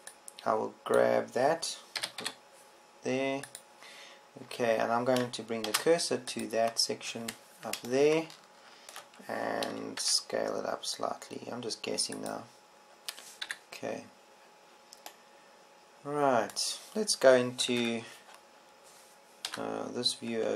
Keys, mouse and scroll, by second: 0.2 a, 1.3 b, 3.5 g, 7.2 shift+s, 11.6 s, 13.8 click, 15.0 KP_1, 19.3 ctrl+Up.